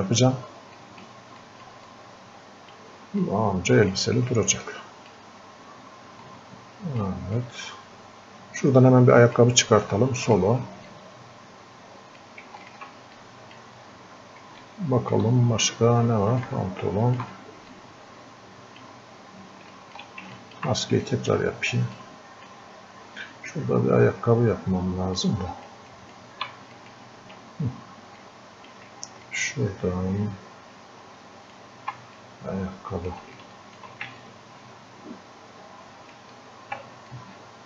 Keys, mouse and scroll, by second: 13.2 click, 13.9-14.2 scroll up 1, 14.6 alt+click, 15.6 scroll up 1, 16.4-17.8 alt+drag, 17.8-19.1 drag, 19.1-19.7 scroll up 1, 19.8 alt+click, 20.4 ctrl+click, 21.0 click, 22.8 scroll up 1, 23.0 scroll down 1, 25.2-26.8 drag, 28.5 click, 29.6-31.6 ctrl+drag, 32.2-34.2 drag, 34.2-37.1 ctrl+drag, 37.1-37.6 drag.